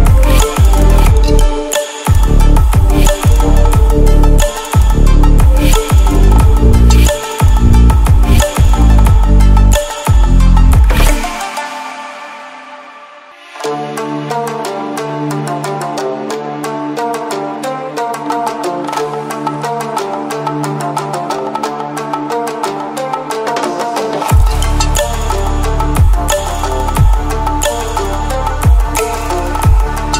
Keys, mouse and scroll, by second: 0.1 right click, 1.1-4.1 drag, 5.4-6.2 ctrl+alt+scroll down 2, 6.8-7.8 alt+shift+drag, 9.3 space, 9.6 click, 9.7-12.1 space, 12.3 click.